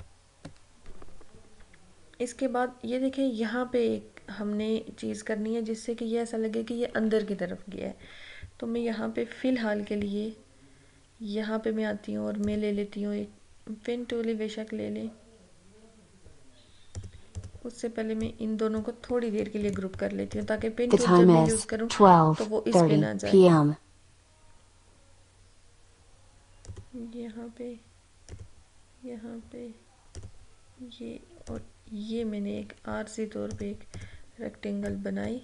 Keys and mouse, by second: 12.4 click, 17.1-19.6 drag, 19.6 ctrl+g, 20.4 click, 26.8-35.4 drag.